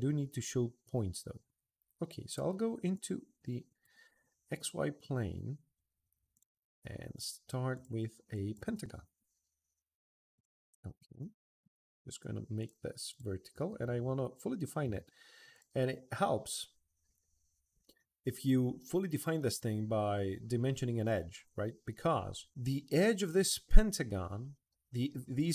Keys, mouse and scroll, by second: 2.7 click, 6.1 click, 6.9 click, 7.5 click, 8.1 click, 10.1 click, 10.9 Escape, 12.4 click, 12.9 click, 13.3 Escape, 13.4 middle click, 13.8 Escape, 14.2 middle click, 15.3 click.